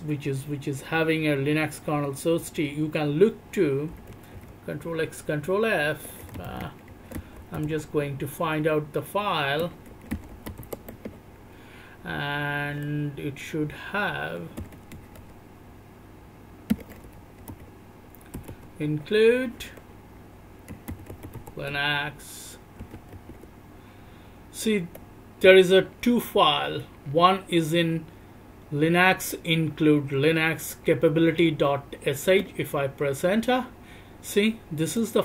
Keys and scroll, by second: 4.4 ctrl+f, 16.7 BackSpace, 32.9 Return.